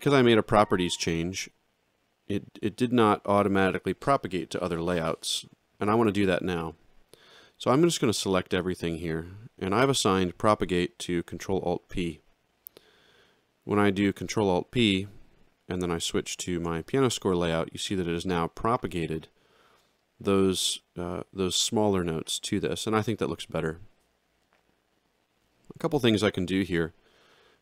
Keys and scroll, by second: 8.0 ctrl+a, 11.9 ctrl+alt+p, 16.5 alt+shift+].